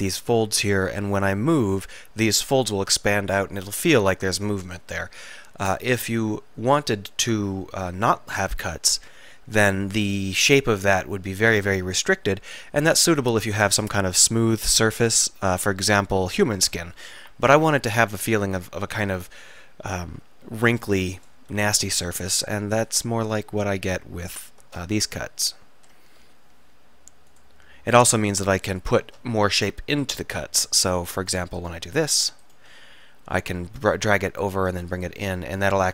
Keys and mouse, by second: 7.5 middle click, 8.4 middle click, 12.6 k, 18.2 middle click, 19.2 middle click, 20.3 k, 25.2 middle click, 26.3 k, 29.9 middle click, 30.4-33.1 middle drag, 33.1-34.5 right drag, 34.0 click, 34.9 s.